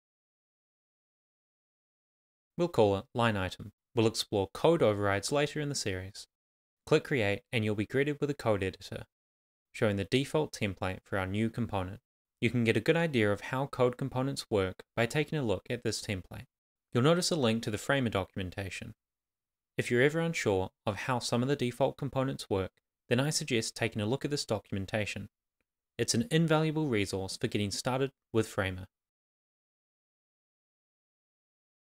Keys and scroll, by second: 3.6 shift+l, 4.1 shift+i, 21.4 super+c, 21.7 super+t.